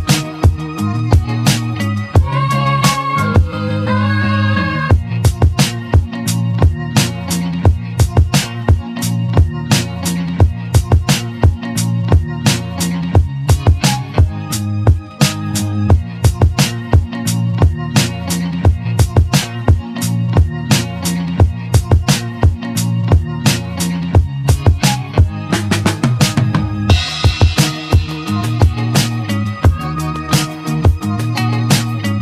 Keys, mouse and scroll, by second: 1.3-3.9 drag, 3.9 r, 7.9 s, 12.6 g, 15.5-16.7 middle drag, 18.8 g, 21.1-23.6 middle drag, 25.8 s, 28.4-29.1 drag, 29.1-32.2 shift+middle drag.